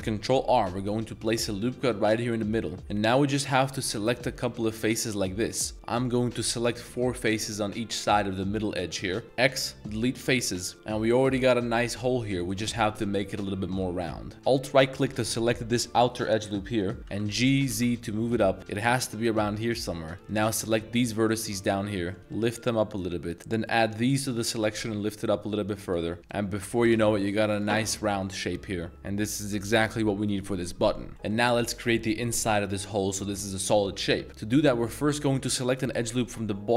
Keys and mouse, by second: 0.0 ctrl+r, 2.3-2.8 middle drag, 3.4 shift+click, 4.2 shift+click, 4.7 shift+click, 5.2 shift+click, 5.7 ctrl+z, 9.2 x, 10.4 1, 10.7 middle click, 10.7 Tab, 12.4 middle click, 13.1 middle click, 13.5 Tab, 13.8 middle click, 14.3 alt+1, 14.7 alt+click, 17.7 z, 20.1 click, 21.3 shift+click, 21.6 middle click, 23.9 shift+click, 24.5 g, 24.8 z, 25.8 click, 26.1 Tab, 26.5 g, 26.8 z, 27.8 Tab, 28.1-30.3 middle drag, 31.1 middle click, 33.2 middle click, 34.7 a, 34.9 a, 35.7 alt+click.